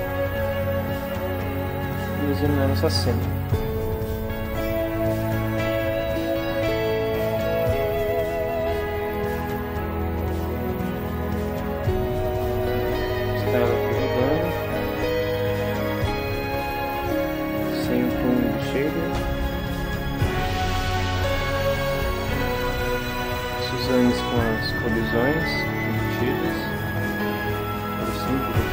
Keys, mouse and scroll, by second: 1.8 scroll up 2, 1.9 click, 6.4 click, 7.9-9.1 drag, 9.2 click, 10.6-13.1 drag, 13.3 click, 14.0-17.5 drag, 18.0-19.1 drag, 19.6-20.6 drag, 21.2 click, 22.4 click, 23.0-24.6 drag, 25.2 click, 26.0 click, 27.8 click.